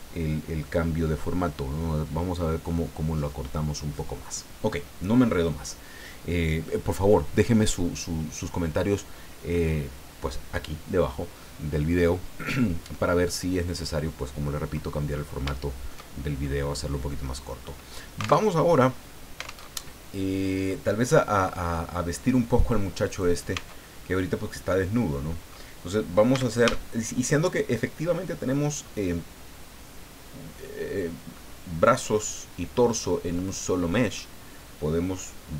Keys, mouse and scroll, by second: 14.0-14.3 scroll down 2, 14.4 middle click, 15.1 scroll up 2, 15.5 shift+middle click, 16.1 shift+scroll down 2, 16.4 shift+middle click, 17.1 middle click, 17.7 scroll up 1, 18.3 alt+Tab, 19.6 alt+Tab, 20.7-22.9 drag, 23.1 right click, 23.5 Tab, 24.2-25.7 drag, 25.7-26.9 middle drag, 26.3 a, 27.7 middle click, 33.4 middle click.